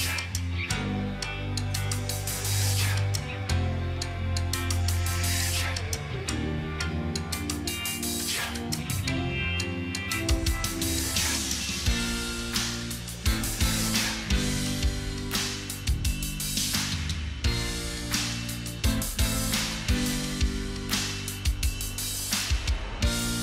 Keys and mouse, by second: 0.4-6.2 typing, 9.5 shift+\, 10.5 space, 11.6 j, 12.0 a, 12.2 k, 13.6-16.1 typing, 18.1-21.1 typing.